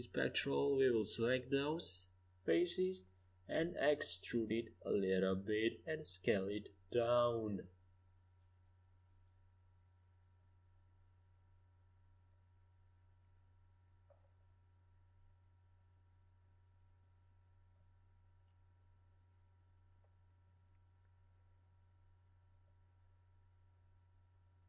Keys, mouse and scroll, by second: 0.6-2.3 middle drag, 5.3 e, 8.9 s, 15.2-16.9 middle drag, 17.9 KP_5, 18.0 KP_1, 18.4 KP_3, 18.6 KP_5, 19.7 z, 22.3-23.7 middle drag, 24.2 a.